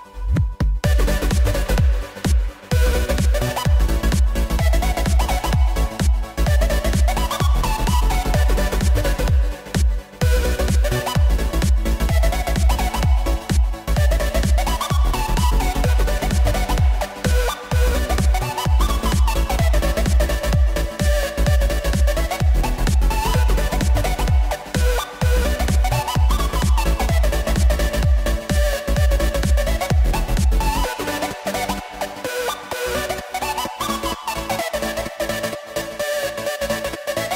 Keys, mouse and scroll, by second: 0.3 scroll down 1, 0.5-2.7 middle drag, 2.7 r, 5.3 KP_1, 6.8 s, 7.9 s, 9.9 g, 10.9 z, 11.5-11.9 scroll up 2, 11.9-13.3 middle drag, 13.3 z, 14.7 KP_1, 16.0 scroll up 1, 16.4 g, 20.6-21.5 shift+middle drag, 21.5 shift+d, 24.9 shift+d, 34.0 click, 35.0 click.